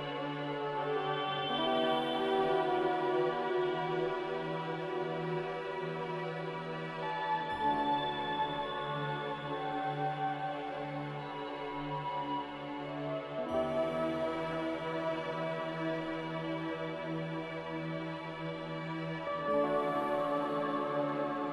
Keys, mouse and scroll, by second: 3.4 b, 4.6 Delete, 7.3 a, 10.7 ctrl+g.